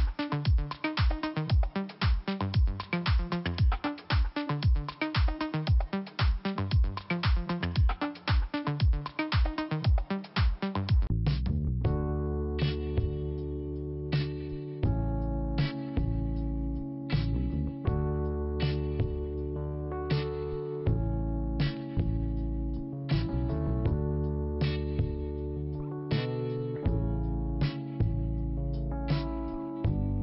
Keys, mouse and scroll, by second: 0.6 click, 2.0 click, 3.4 middle click, 4.2 click, 6.3 click, 9.0 click, 11.1 middle click, 11.1 middle click, 12.0 click, 13.6 middle click, 14.6 click, 14.8 click, 18.1 click, 19.8 click, 21.2 middle click, 24.2 click, 24.7 middle click, 25.7 click, 28.7 click, 28.8 click, 29.9 click.